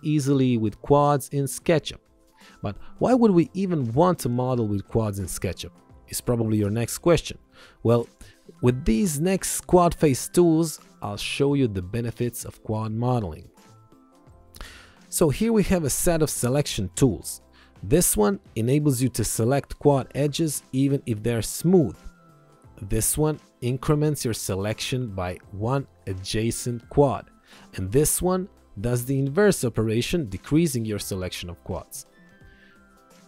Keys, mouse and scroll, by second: 0.3 alt+y, 2.1 alt+y, 3.1 alt+y, 14.7 alt+y, 18.7 click.